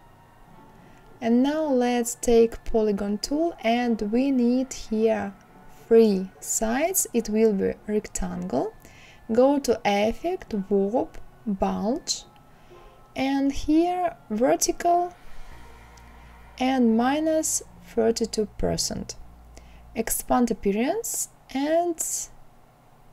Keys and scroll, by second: 4.9 KP_3.